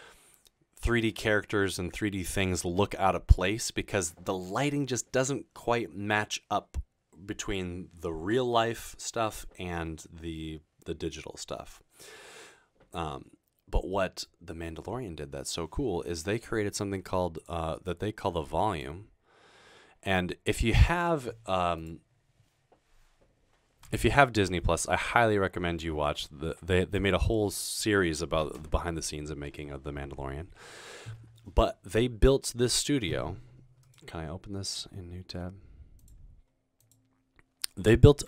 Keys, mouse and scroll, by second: 36.0 click.